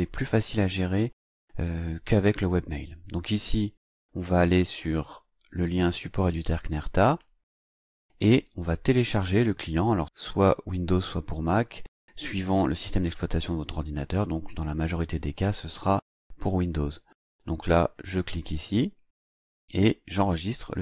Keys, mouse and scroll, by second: 7.6 click, 18.0 click.